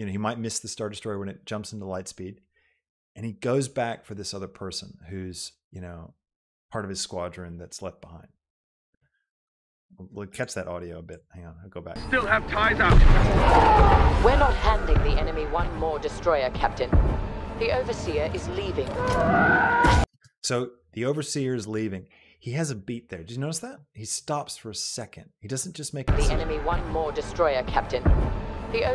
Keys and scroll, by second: 12.1 space, 20.2 space, 26.0 space.